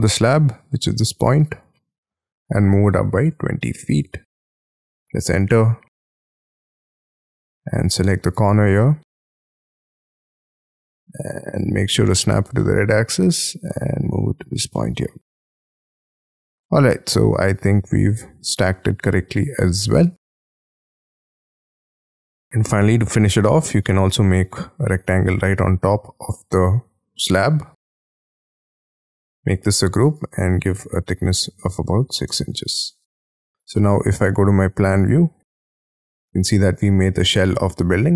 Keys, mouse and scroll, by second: 1.4-2.9 scroll down 7, 2.9-6.0 typing, 4.9-5.5 scroll down 12, 7.5-9.0 scroll up 13, 9.1-9.8 scroll down 13, 10.1-10.6 shift+scroll down 1, 10.6 shift+middle click, 12.3 shift+scroll up 1, 12.5 shift+middle click, 13.1 shift+scroll up 3, 14.1 shift+scroll, 14.4 shift+click, 14.7 shift+middle click, 16.3 space, 16.6 middle click, 17.9 middle click, 18.0 scroll down 1, 18.5 middle click, 19.0 middle click, 19.5 middle click, 20.0-20.3 scroll down 3, 20.3 shift+middle click, 21.0 Escape, 21.3 Escape, 21.5 space, 22.3 middle click, 23.6 r, 23.8 scroll up 4, 25.5 shift+middle click, 27.3 Up, 28.5 space, 29.1 double click, 29.5-32.8 typing, 30.0 double click, 32.2 Return, 32.6 middle click, 33.0 Escape, 33.3 Escape.